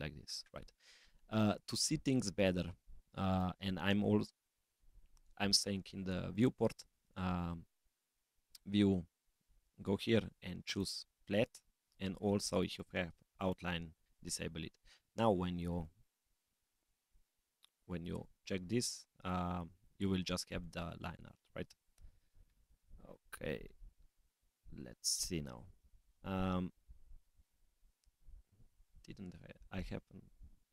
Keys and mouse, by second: 15.9 click, 18.3 click, 20.6 click, 23.1 middle click, 26.7 middle click, 30.4-30.7 drag.